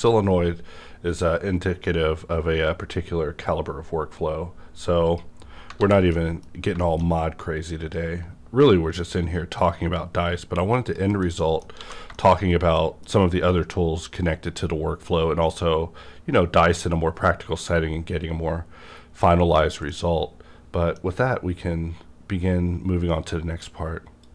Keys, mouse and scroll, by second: 0.5 scroll up 1, 5.1 click, 5.1-5.6 scroll up 1, 5.8 alt+a, 6.1 middle click, 6.2 middle click, 6.5 scroll down 1, 6.8 shift+middle click, 7.8 click, 10.9 click, 11.1 KP_Decimal, 11.5 middle click, 11.5 scroll down 1, 11.7 scroll up 1, 11.8 alt+a, 12.1 shift+middle click, 12.4 alt+a, 12.4 shift+middle click, 12.4 scroll up 1, 12.7 middle click, 19.1 middle click, 19.1 scroll down 1, 19.9 middle click, 19.9-23.3 middle drag.